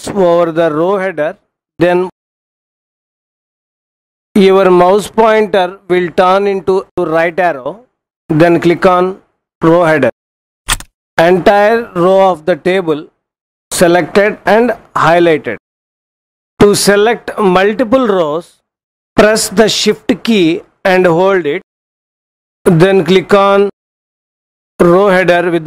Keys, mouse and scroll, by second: 10.3 click.